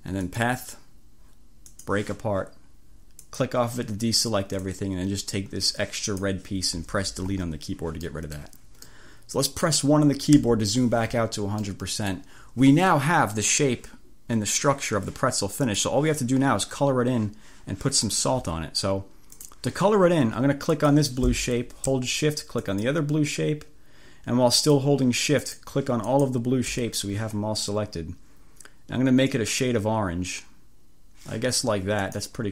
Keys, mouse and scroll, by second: 0.4 click, 1.7 click, 3.3 click, 4.8-6.5 drag, 7.2 Delete, 8.2-9.8 scroll up 2, 9.8 click, 10.5 1, 11.6 click, 15.7 click, 19.5 click, 20.9 click, 22.6 click, 24.6 click, 25.5 click, 26.2 click, 29.4 click, 32.1 click.